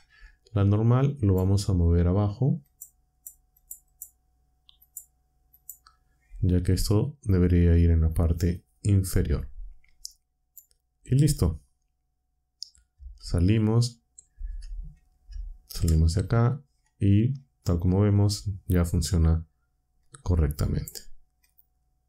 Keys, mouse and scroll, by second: 1.2 click, 2.6 click, 3.1 click, 3.5 click, 3.8 click, 4.8 click, 5.5 click, 10.4 click, 12.9 Tab, 12.9 Tab, 15.6 ctrl+Down, 20.0-20.9 drag, 21.4 click.